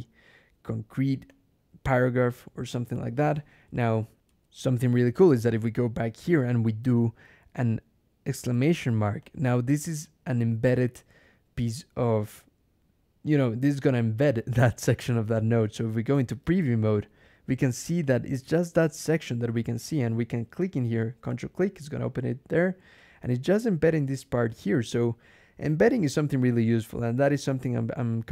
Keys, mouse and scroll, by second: 1.1-2.3 drag, 2.6 click, 4.1 alt+\, 8.2 shift+1, 9.1 click, 13.1 click, 16.3 ctrl+e, 17.9 click, 18.9 click, 21.2 ctrl+click, 22.8 click, 24.4 click.